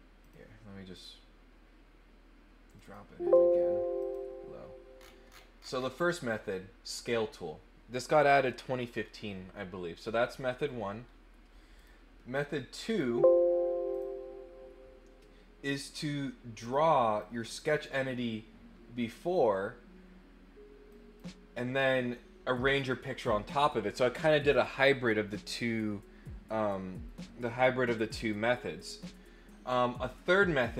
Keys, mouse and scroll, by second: 0.2 click, 0.9 click, 2.6 click, 4.0 click, 4.9-5.7 scroll down 3, 5.7 scroll up 1, 11.7 click, 12.9 click, 13.9 click, 15.6 click, 16.6 click, 17.2 click, 20.9 click.